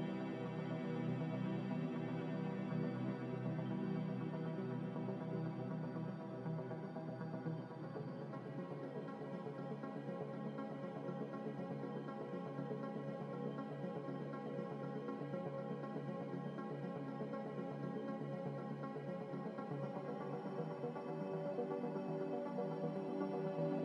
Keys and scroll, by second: 0.0 z, 1.4 ctrl+z, 1.8 ctrl+z, 5.4 ctrl+z, 5.5 ctrl+z, 5.6 ctrl+z, 6.1 ctrl+z, 6.3 ctrl+z, 12.8-13.4 typing, 14.3 ctrl+z, 21.7 ctrl+z, 22.0 ctrl+z, 22.2 ctrl+z, 22.5 ctrl+z.